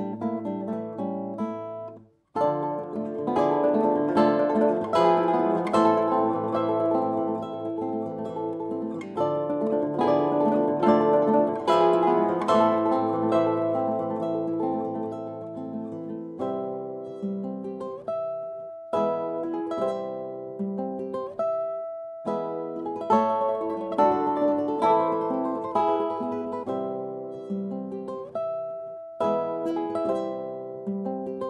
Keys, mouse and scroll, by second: 3.6-6.0 drag, 7.6-10.0 drag, 13.8-14.8 right drag, 14.7-17.3 drag, 16.8 e, 23.1-26.4 middle drag, 26.4 shift+d.